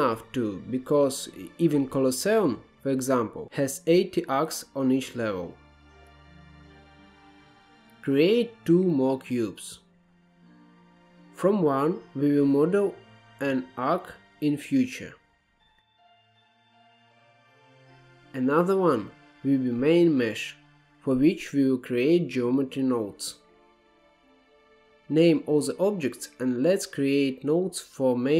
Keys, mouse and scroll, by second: 3.7 Tab, 4.1-4.7 scroll down 2, 5.0 click, 5.5-6.5 scroll down 1, 6.6 shift+a, 9.1-10.1 scroll down 3, 10.1 alt+z, 10.9-11.9 scroll down 1, 11.9-13.0 scroll down 1, 13.0-13.4 scroll down 1, 13.4 g, 15.5-16.0 shift+middle drag, 16.0 Tab, 17.3-18.1 shift+middle drag, 18.1 click, 18.7 shift+a, 23.4-26.3 drag, 27.3-28.2 drag.